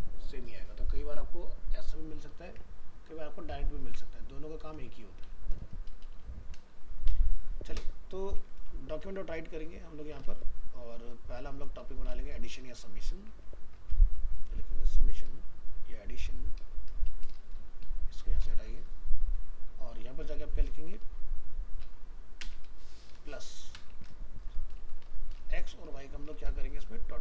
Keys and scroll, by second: 2.5 alt+Tab, 12.3 ctrl+shift+Right.